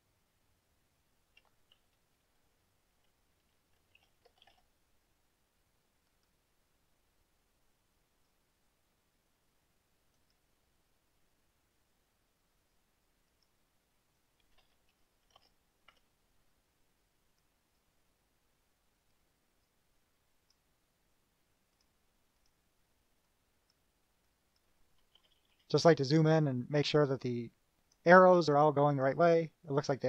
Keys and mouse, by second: 3.8-5.1 typing, 6.3 click, 8.3 click, 10.3 click, 13.5 right click, 14.3 click, 15.5 shift+p, 16.1 4, 17.5 click, 17.8 click, 19.3 click, 20.6 click, 21.9 click, 23.4-24.0 drag, 24.4 click, 25.3 KP_Add, 26.7-28.2 drag, 28.8-29.3 drag, 29.8 KP_Subtract.